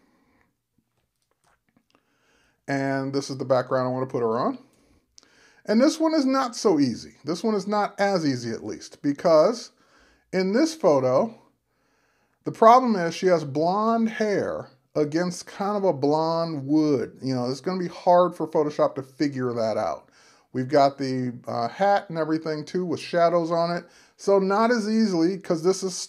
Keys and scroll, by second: 1.5 Return, 24.2 super+-.